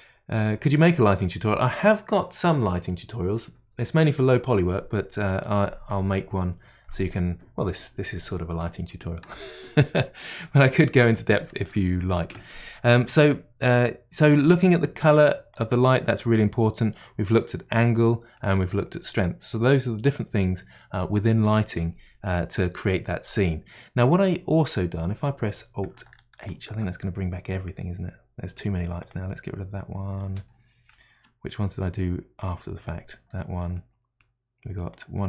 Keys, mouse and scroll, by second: 15.5 click, 16.8-19.8 middle drag, 26.5 alt+h, 27.6-29.0 middle drag, 29.0 click, 30.3 Delete, 30.9-32.4 middle drag, 32.4 click, 33.2 Delete, 33.8-34.9 middle drag, 34.9 click.